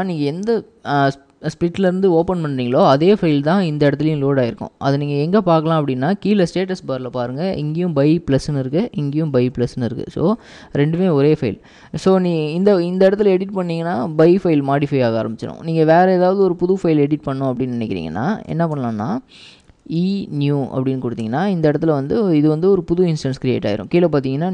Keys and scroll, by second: 0.0-0.6 typing, 2.7-3.4 typing, 9.1 ctrl+w, 9.4 h, 10.8 ctrl+w, 11.1 typing, 12.4-13.0 typing, 18.6-20.7 typing, 21.3 Return.